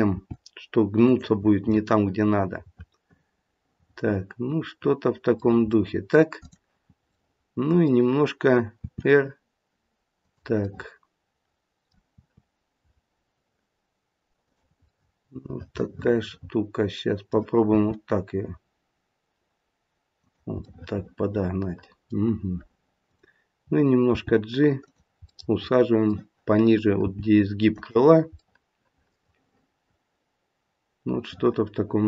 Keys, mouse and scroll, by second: 1.8 middle click, 2.2 middle click, 3.0 middle click, 3.3 middle click, 3.5 middle click, 5.6 middle click, 5.8 middle click, 6.4 click, 7.1 middle click, 8.7 r, 10.6 middle click, 12.1 r, 14.9 middle click, 16.0 middle click, 17.7 r, 20.6 middle click, 23.1 click, 24.0 g, 25.3 middle click, 27.0 g.